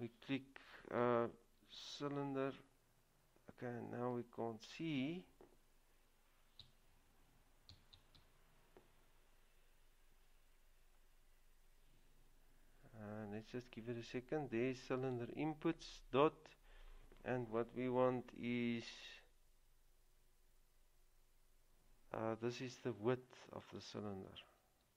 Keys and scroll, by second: 1.8 typing, 6.8 typing, 12.4-13.2 typing, 24.8 typing.